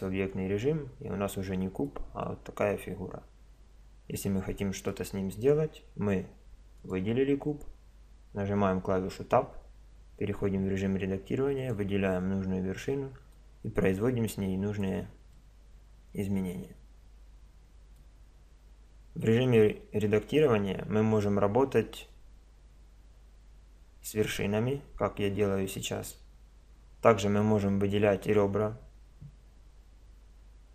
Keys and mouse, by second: 1.0 middle click, 2.3-4.2 middle drag, 6.8-8.5 drag, 8.5 Tab, 11.6-13.3 drag, 13.3 middle click, 13.6-15.2 drag, 15.4-18.5 middle drag.